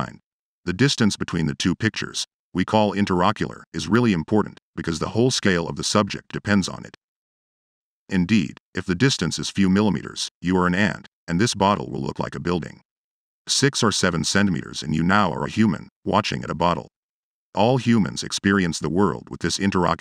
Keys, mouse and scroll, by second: 0.3-1.5 drag, 2.7-5.4 drag, 6.4 click, 6.9 click, 7.6 click, 8.4 middle click, 9.2-10.8 drag, 12.5-20.0 drag.